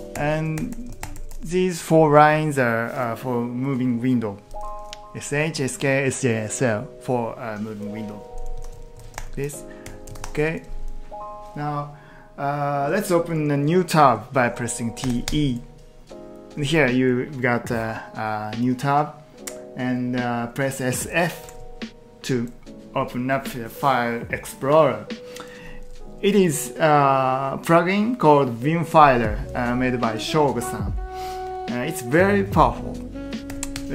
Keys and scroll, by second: 8.6 Escape, 8.7-10.2 typing, 10.2 ctrl+t, 15.1 t, 15.3 Return, 21.2-22.1 typing, 32.8-33.5 typing, 33.7 Return.